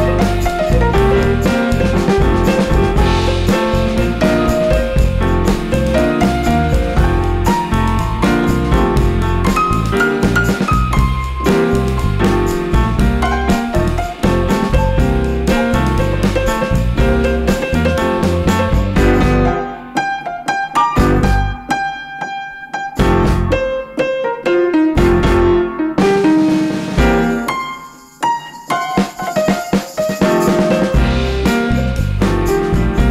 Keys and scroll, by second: 1.3 super+z, 2.4 super+z, 4.4 super+z, 5.3 super+z, 6.5 super+z, 8.0 super+z, 8.9 super+z, 12.5 super+z, 15.7 super+z, 16.7 super+z, 18.8 super+z, 18.8 super+x, 21.9 super+x, 27.1 super+x, 27.2 super+z, 32.0 super+z.